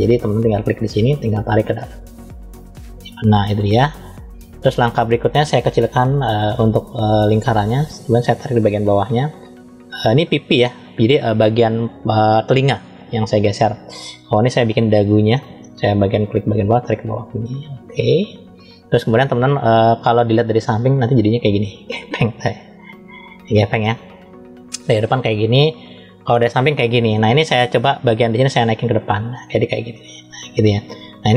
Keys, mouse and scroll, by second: 2.1 click, 5.9 f, 16.2 click, 20.6-23.8 middle drag, 24.6 KP_1, 26.0 KP_3, 28.3 click.